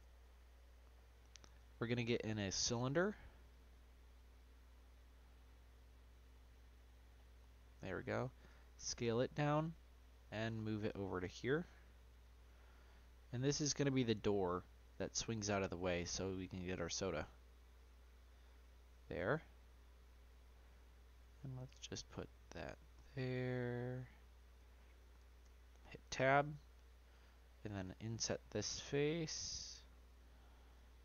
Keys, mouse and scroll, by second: 0.0 Delete, 0.9-2.2 middle drag, 2.2-3.5 drag, 4.1-7.1 drag, 7.6 middle click, 8.4 s, 10.7 click, 12.4-13.4 middle drag, 13.4 click, 14.5 click, 15.1 middle click, 15.7-16.5 scroll up 2, 16.5 click, 17.8 click, 19.2 middle click, 20.1 click, 21.4 click, 22.2-25.4 middle drag, 25.4 Tab, 26.3 click.